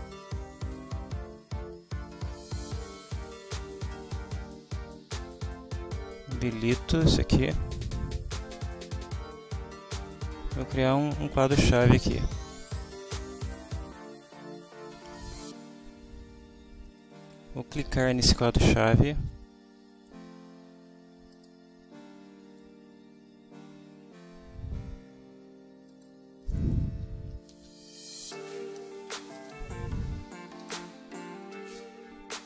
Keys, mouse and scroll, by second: 0.3 click, 7.2 click, 12.4 click, 21.3 click, 25.9 click, 27.1-30.0 typing, 30.6 Return.